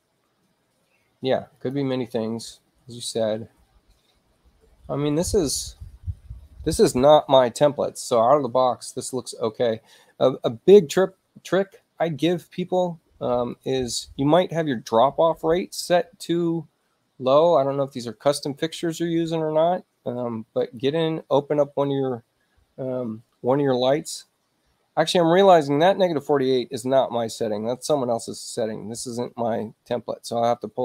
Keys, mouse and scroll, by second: 1.5 click, 13.5 click, 20.6 click.